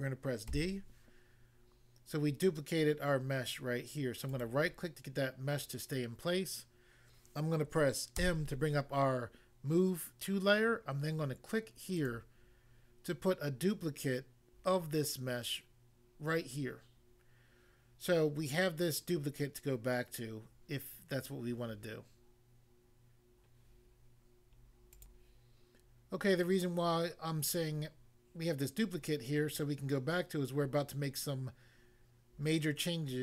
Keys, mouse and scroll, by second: 0.5 d, 4.3 right click, 4.4 right click, 8.1 m, 11.9 click, 12.0 click, 25.0 click, 25.1 click.